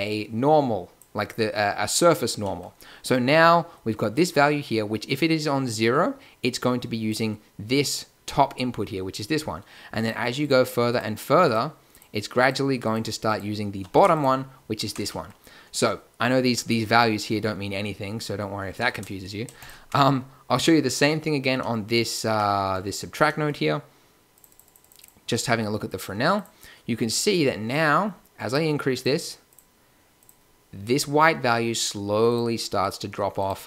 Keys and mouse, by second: 15.8-18.1 middle drag, 26.9-28.0 middle drag, 28.4 click.